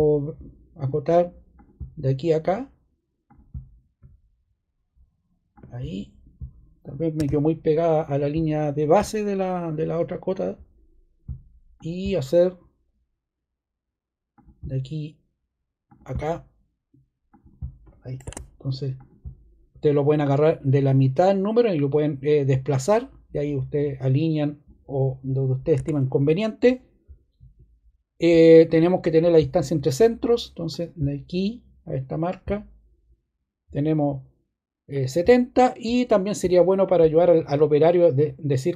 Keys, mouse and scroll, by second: 7.1 ↻, 18.2 ↺, 25.7 ↻, 29.0 click, 30.6 click, 32.1 click.